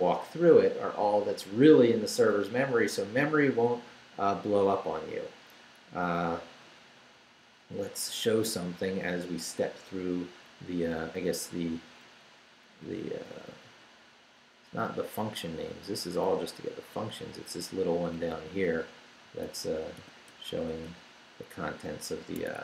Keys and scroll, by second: 5.9 Down, 10.0 Up, 10.5 Down, 11.2 Up, 13.4 Left, 16.3 Down, 17.7 Up, 18.7 Left, 19.2 Right, 20.0 i, 20.3 BackSpace, 22.4 Tab.